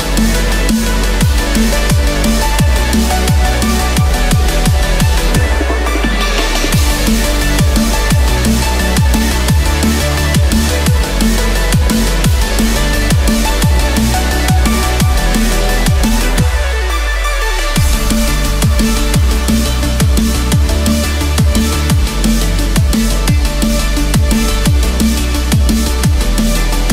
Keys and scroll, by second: 5.8 ctrl+z, 14.1 Return, 15.3 ctrl+z, 24.2 ctrl+z, 25.5 Return, 26.6 Escape.